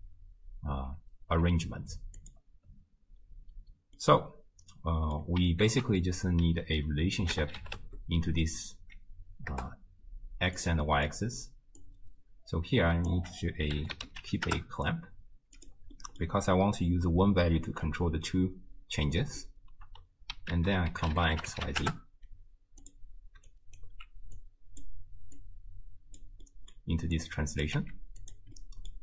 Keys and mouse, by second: 1.4 z, 4.0-5.2 middle drag, 5.7 ctrl+a, 10.9 middle click, 11.8-15.7 drag, 16.0 middle click, 20.5 ctrl+a, 23.5-23.8 alt+drag, 24.4-24.8 drag, 25.4-26.2 drag, 26.5 middle click, 27.2-27.8 drag, 27.8 g, 28.6 middle click.